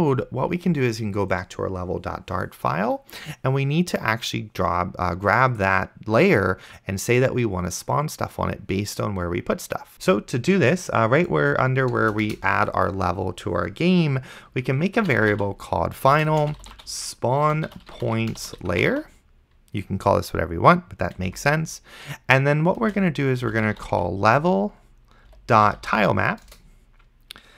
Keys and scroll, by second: 12.3 Return, 14.8-19.7 typing, 21.2 space, 21.3 =, 22.8-26.4 typing, 26.5 Return.